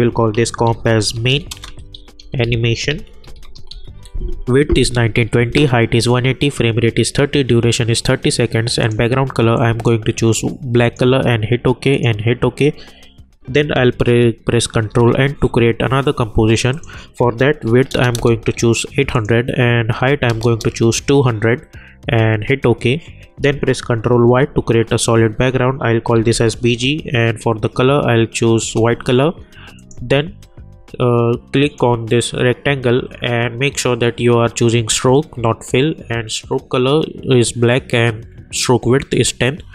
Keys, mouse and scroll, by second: 0.4-4.2 typing, 11.3 click, 14.8 ctrl+n, 16.7 click, 19.1 click, 22.0 Return, 24.4 ctrl+y, 25.9-26.8 typing, 28.6 Return, 29.7 click.